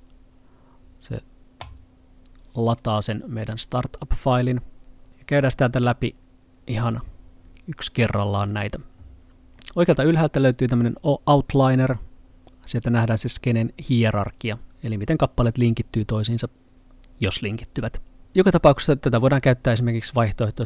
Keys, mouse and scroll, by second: 1.7 click, 6.9 click.